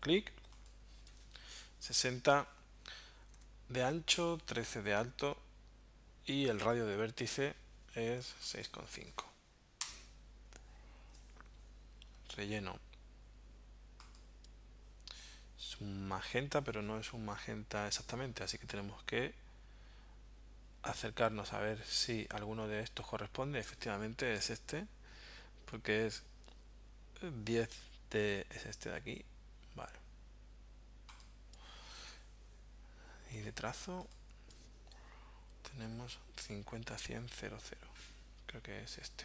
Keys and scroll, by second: 3.4 Tab, 6.5 Tab, 8.0-9.2 typing, 9.8 Return.